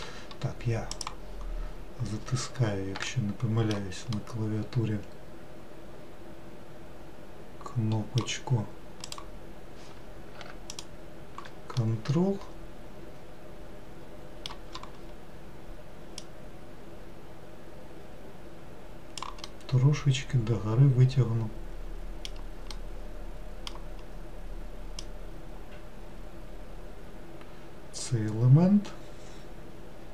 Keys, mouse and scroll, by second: 1.0 click, 1.8-2.6 scroll down 1, 3.2-7.2 shift+middle drag, 9.1 click, 10.8 ctrl+click, 11.8-15.0 middle drag, 16.3 click, 19.6-22.6 middle drag, 22.8-25.1 middle drag, 25.1 click.